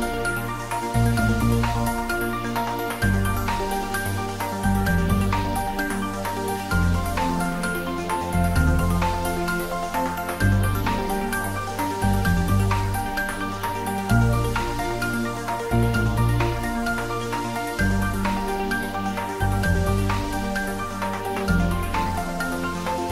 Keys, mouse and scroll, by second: 1.0 click, 1.4 ctrl+z, 1.5 ctrl+click, 1.9 ctrl+z, 5.6 click, 7.2 click, 7.5 middle click, 8.2 click, 9.3 g, 10.1 click, 10.4 middle click, 11.0 click, 11.6 middle click, 12.7 shift+click, 14.3 ctrl+r, 17.2 click, 19.7 middle click, 20.6 shift+click, 21.7 middle click, 22.1 middle click, 22.5 shift+middle click, 22.9 click.